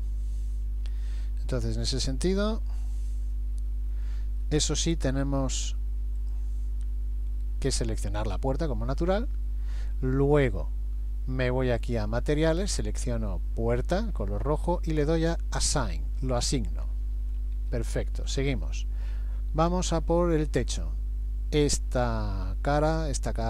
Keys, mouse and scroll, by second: 0.8 Escape, 1.9 a, 2.5 a, 2.6 a, 3.4 middle click, 6.2 click, 7.7 middle click, 12.4 click, 15.6 click, 17.7 shift+middle click, 18.7 middle click, 20.6 click, 21.7 middle click, 23.3 shift+click.